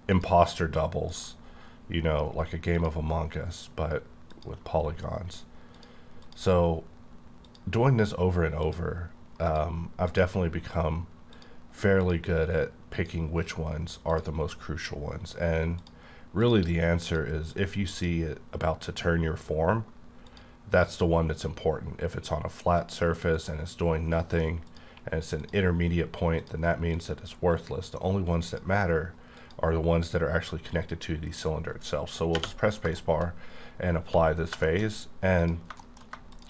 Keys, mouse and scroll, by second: 0.1 click, 1.1 click, 2.7 click, 4.3 click, 5.7 click, 6.2 click, 7.4 click, 8.6 click, 9.5 click, 10.0 click, 11.3 click, 12.9 click, 14.1 click, 15.8 click, 16.4 click, 17.0 click, 17.9 click, 20.3 click, 20.9 click, 22.8 click, 23.3 click, 25.4 click, 26.4 click, 26.9 click, 28.4 click, 29.4 click, 32.4 space, 32.9 shift+middle click, 34.0 1, 34.6 shift+middle click, 34.8-35.4 shift+scroll up 3, 35.4 click, 35.8 middle click, 36.3 shift+click.